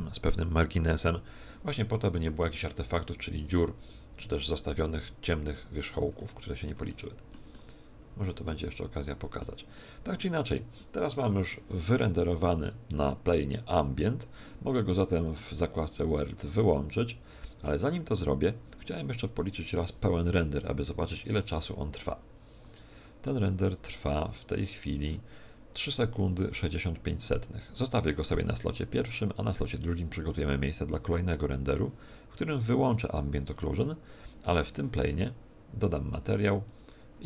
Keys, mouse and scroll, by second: 5.6-6.6 scroll down 11, 6.8 shift+middle click, 7.5 middle click, 8.4 middle click, 9.7 middle click, 15.2 click, 30.8 Escape, 30.8 click, 32.6 click, 35.8 click, 36.6 click.